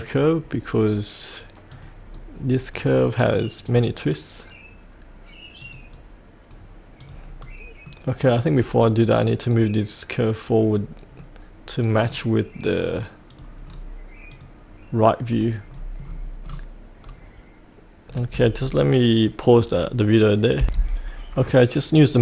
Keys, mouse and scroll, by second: 2.2-3.6 right drag, 3.6 click, 5.9 right click, 7.0 click, 7.4-7.9 scroll up 1, 7.9 middle click, 8.5 scroll down 1, 10.7-11.2 scroll up 1, 11.2-12.7 middle drag, 13.3 click, 13.6-14.3 scroll down 1, 14.3 click, 14.9 click, 15.2-16.1 scroll down 1, 17.0-20.6 scroll up 1, 20.6 F8, 22.0 click.